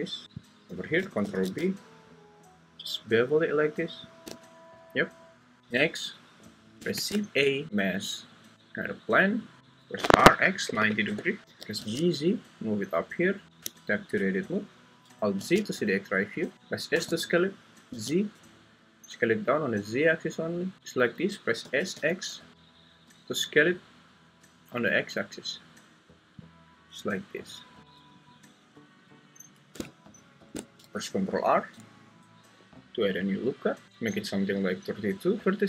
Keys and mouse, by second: 1.2 ctrl+b, 4.1 shift+click, 6.9 shift+a, 10.0-11.8 typing, 11.0 Return, 13.6 Tab, 15.4 alt+z, 16.5 Escape, 16.5 s, 16.5 z, 16.9 s, 17.9 z, 21.6 s, 22.0 x, 26.4 click, 31.4 ctrl+r, 33.8 Escape.